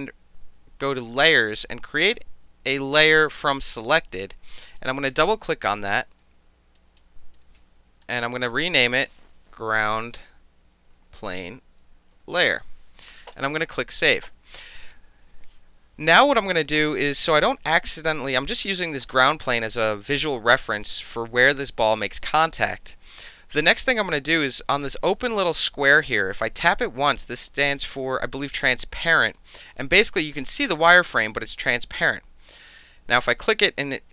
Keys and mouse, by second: 1.1 click, 3.8 click, 4.5 click, 6.7 click, 7.3 click, 8.4 click, 8.5 click, 9.2-13.0 typing, 13.9 click, 16.9 click, 17.7 click, 18.5 click, 19.0 click, 19.6-20.8 alt+drag, 26.6 click, 27.7 click, 28.5 alt+click, 29.3 alt+click, 29.8 drag, 30.4-30.7 drag, 30.7-31.3 middle drag, 31.3 drag, 31.5-33.2 middle drag, 33.2 click, 33.3-34.1 middle drag.